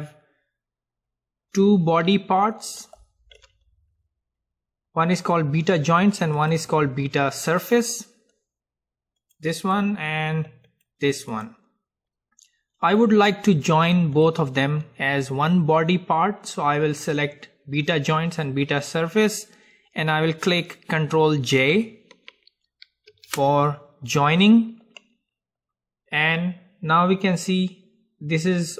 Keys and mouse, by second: 2.1-5.0 middle drag, 6.4-8.4 drag, 9.3-16.3 drag, 23.2 ctrl+j.